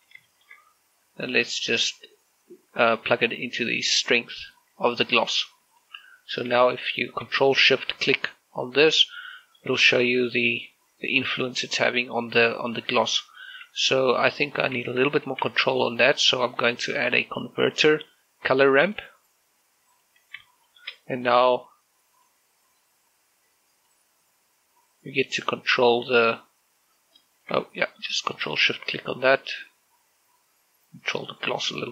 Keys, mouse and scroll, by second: 0.1 click, 1.0 shift+middle click, 2.4-6.0 drag, 6.3 g, 6.5 click, 7.5 ctrl+shift+click, 10.0 middle click, 10.6 scroll up 1, 11.1 shift+middle click, 11.3-14.6 middle drag, 15.4 click, 15.6 g, 15.9 click, 16.2 shift+a, 19.7 click, 21.4 shift+middle click, 22.4 click, 23.6-26.5 drag, 26.5-28.2 drag, 28.2 ctrl+shift+click, 28.6 shift+middle click, 30.3-31.9 drag.